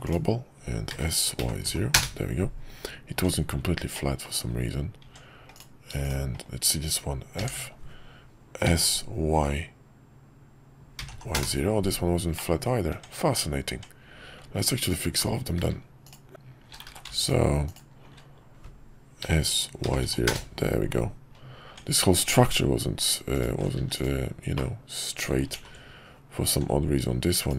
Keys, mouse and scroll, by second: 3.1 Tab, 3.9 middle click, 7.5 f, 8.6 s, 12.3 middle click, 12.9 Tab, 16.9 ctrl+z, 19.2 s, 21.7 Tab, 23.7 x, 24.6 middle click, 25.6 ctrl+z.